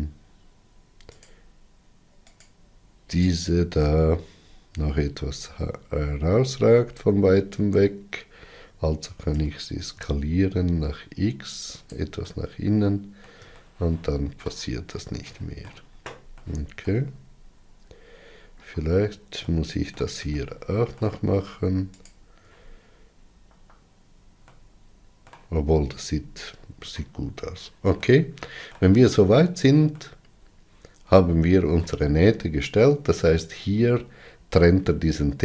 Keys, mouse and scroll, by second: 1.1 alt+click, 2.3 alt+click, 3.1 alt+click, 4.2-4.5 scroll down 3, 4.9 alt+z, 6.3-7.0 scroll down 3, 9.3 s, 12.2-18.5 middle drag, 18.5 alt+z, 19.3-22.0 middle drag, 22.0 alt+click, 23.4 alt+z, 24.5-25.9 middle drag, 25.9-27.2 scroll down 8, 27.9-35.4 middle drag.